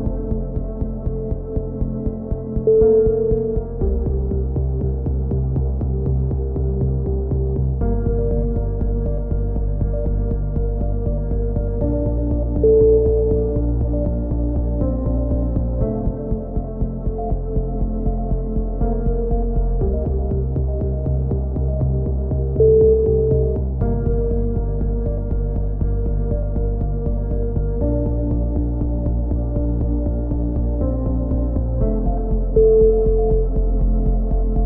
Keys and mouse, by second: 0.3-2.8 drag, 1.1 right click, 2.8 ctrl+KP_7, 5.2 a, 5.3 z, 5.9 z, 6.4 click, 8.9-11.0 middle drag, 8.9 a, 11.0 right click, 11.3 middle click, 11.9 right click, 12.8 a, 13.2 click, 15.7-17.7 drag, 17.6 ctrl+KP_7, 17.9 middle click, 18.6 z, 19.0 z, 19.3-20.3 drag, 20.8 z, 20.8 c, 21.9 click, 23.8 c, 24.4-25.6 drag, 25.6 a, 25.8 z, 25.9 Tab, 26.4-27.4 drag, 27.7 KP_3, 28.0 z, 28.8 z, 29.1 Tab, 31.6 KP_3, 32.0 z, 33.5 click, 34.3 z.